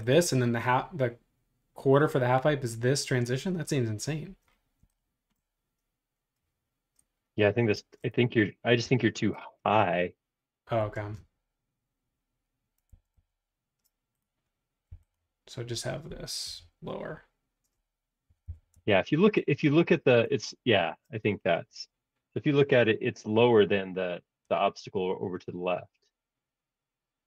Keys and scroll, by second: 7.7 space, 8.8 m, 10.6 Escape, 12.9 super+z, 13.1 super+z, 14.9 m, 18.1-19.4 typing, 20.2 super+Tab.